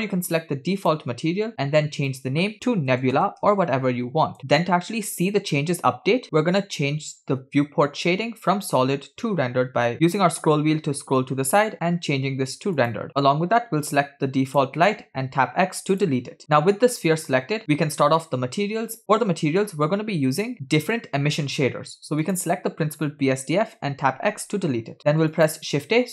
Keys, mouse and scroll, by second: 2.1-4.4 drag, 6.7-7.5 scroll down 4, 7.5-8.9 scroll up 2, 8.9 scroll up 1, 8.9-9.5 scroll down 2, 9.5-9.9 scroll down 5, 9.9 scroll up 2, 10.7-11.5 scroll down 5, 14.5 click, 15.4 x, 16.4 click, 17.6 middle click, 19.0 scroll up 8, 22.3 click, 24.3 x, 25.0 shift+a.